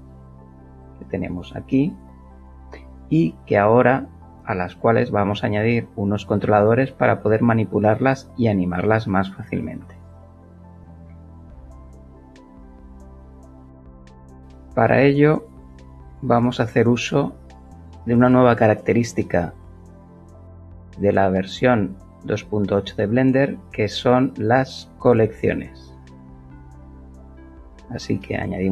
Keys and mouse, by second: 7.5-10.8 alt+middle drag, 13.5 click, 26.1 click.